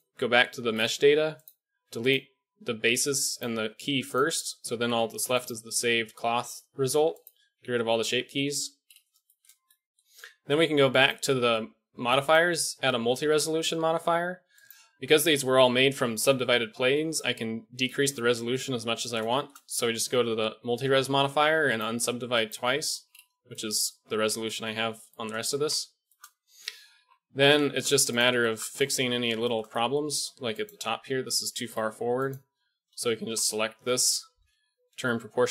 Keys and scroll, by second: 17.0 KP_1, 22.0 typing, 25.6 a, 26.7 KP_1, 26.9 KP_3, 28.9 Tab, 32.8 KP_1, 33.2 KP_3, 34.4 o.